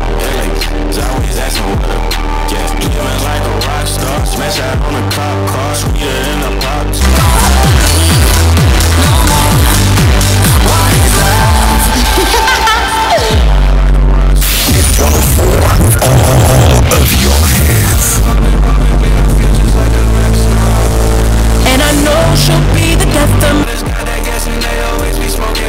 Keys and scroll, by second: 24.0 Page_Down.